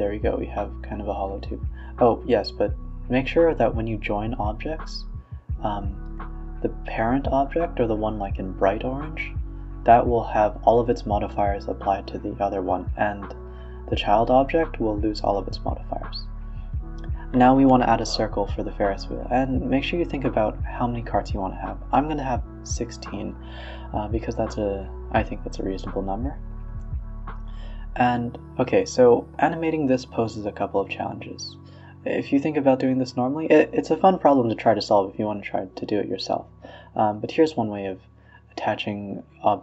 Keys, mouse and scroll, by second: 0.2 shift+click, 1.0 ctrl+j, 1.4-2.0 middle drag, 2.0 Tab, 2.3 Tab, 2.7 ctrl+z, 2.9 ctrl+z, 3.1 ctrl+z, 4.1-4.9 right drag, 4.9 Tab, 5.4 Tab, 5.6 Tab, 5.9 Tab, 6.4 click, 6.5 Tab, 6.6 click, 7.2 click, 7.4 Tab, 7.6 Tab, 7.7 shift+drag, 8.2 ctrl+j, 8.6 shift+click, 9.2 ctrl+j, 9.6-11.3 middle drag, 11.6 scroll down 5, 12.1 KP_1, 12.7 KP_3, 12.9 a, 13.0 a, 14.3 r, 14.8 s, 15.9-18.1 drag, 20.8 Escape, 21.0 click, 21.3 click, 21.7 s, 22.6 drag, 23.0 s, 23.8 click, 24.3 r, 26.5 s, 27.2 click, 27.6-28.1 scroll up 2, 28.1 shift+a, 29.3-31.0 middle drag, 31.0-31.4 scroll up 4, 31.4-32.0 scroll down 2, 32.0 KP_3, 32.8 click, 33.4 shift+a, 35.9 s, 37.0-37.4 scroll up 1, 37.4 g, 39.5-39.6 scroll up 1.